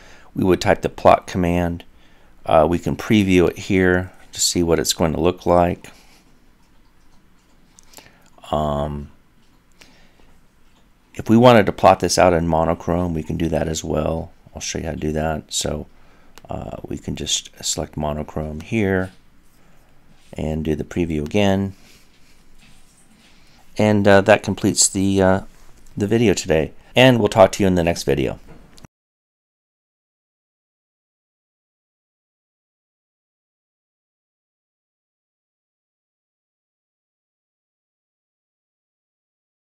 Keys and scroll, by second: 1.8 typing.